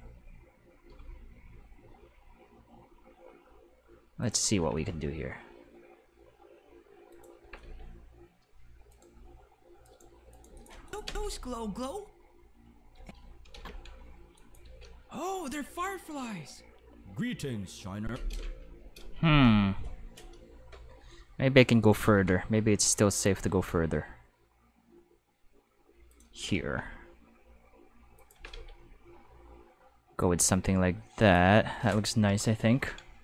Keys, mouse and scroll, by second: 0.9 g, 4.2 click, 4.6 g, 7.1 click, 7.2-8.3 typing, 9.8 right click, 10.2-11.1 typing, 10.3 right click, 10.6 click, 10.9 click, 12.9 space, 13.5 ctrl+z, 14.4 click, 14.6 space, 18.0 space, 18.1 5, 20.7-22.6 typing, 22.1 middle click, 26.1 click, 26.1-27.0 typing, 28.1-29.1 typing, 28.1 click, 31.2 click, 32.6 ctrl+s, 32.7 ctrl+s.